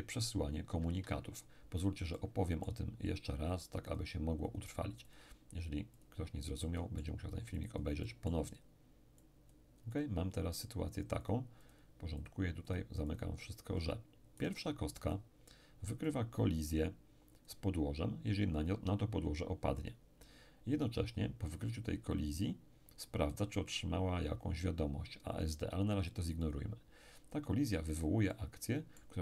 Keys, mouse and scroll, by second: 0.7 Escape, 2.1-3.6 middle drag, 3.9-14.1 drag, 6.6-14.1 middle drag, 14.4 right click, 16.1 click, 17.4 click, 23.7 click, 26.4 click, 28.3-29.2 middle drag.